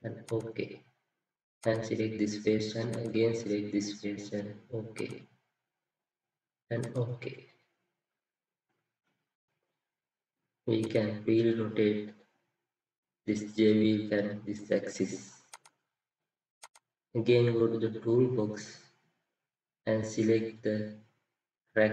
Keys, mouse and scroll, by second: 8.2 scroll up 1, 8.9 middle click.